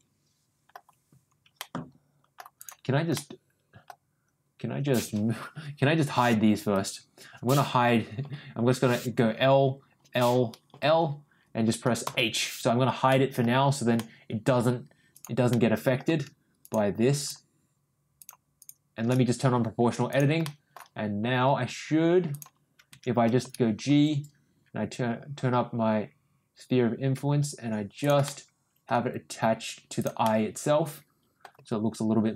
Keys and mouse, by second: 1.5 ctrl+middle click, 2.6 ctrl+click, 3.1 ctrl+middle click, 5.5 l, 8.2 l, 10.7 l, 12.0 h, 13.1 middle click, 14.0 middle click, 15.1 click, 15.5 middle click, 16.6 shift+click, 17.1 shift+click, 18.2 shift+click, 18.6 shift+click, 20.1 click, 20.4 middle click, 21.2 g, 23.4 ctrl+g, 28.2 middle click, 29.0 g, 30.2-31.4 middle drag, 31.5 g.